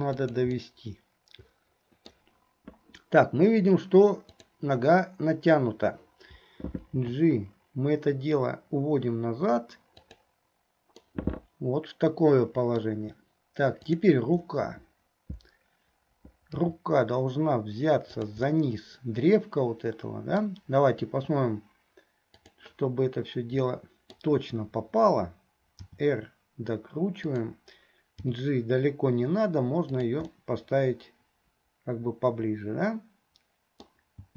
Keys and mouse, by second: 0.9-2.4 middle drag, 4.4 click, 11.1-13.0 drag, 18.6-19.9 drag, 19.9 middle click, 22.6 click, 23.9 middle click, 30.5-34.1 middle drag.